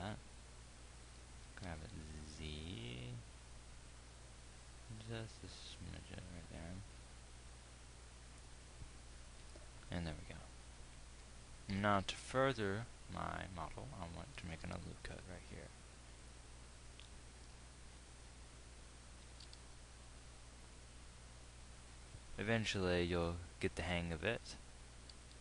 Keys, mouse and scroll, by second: 1.8 g, 15.2 ctrl+r, 20.0 g.